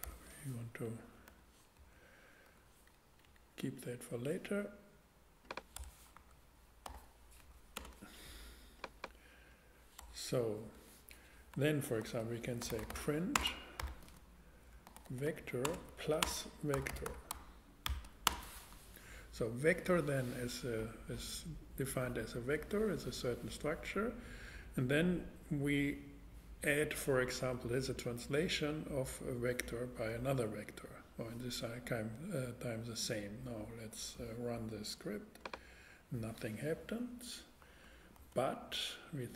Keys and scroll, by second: 0.0 alt+3, 0.8 alt+Up, 1.3 Return, 1.8 Left, 2.5 Return, 3.1 Up, 3.8 Down, 5.8 BackSpace, 6.2 Right, 6.8 f, 7.4 Left, 7.8 space, 10.0 BackSpace, 10.6 super+BackSpace, 11.5 super+Return, 12.4-13.8 typing, 14.9-19.1 typing, 38.2 super+Tab.